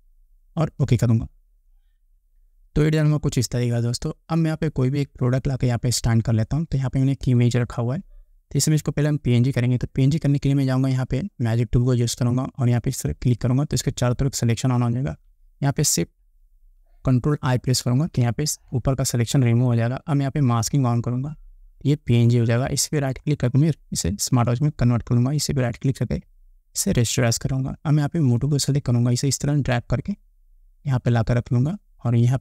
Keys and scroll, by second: 18.0 ctrl+shift+i.